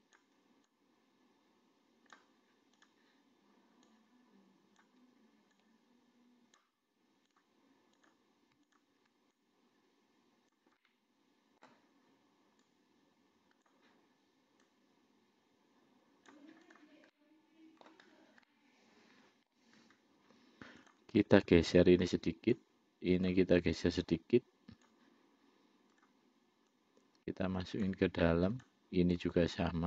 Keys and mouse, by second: 1.0-2.5 drag, 3.1 click, 4.1-5.2 drag, 5.8-6.9 drag, 8.3 click, 9.0 shift+click, 9.6-11.0 drag, 11.1 middle click, 12.9-14.0 drag, 14.9-16.6 drag, 17.4 middle click, 18.7-19.8 middle drag, 21.1 click, 22.1 click, 23.5 click, 24.2-25.2 drag, 26.2 click, 27.0-28.2 drag, 28.8 click, 29.5-29.8 drag.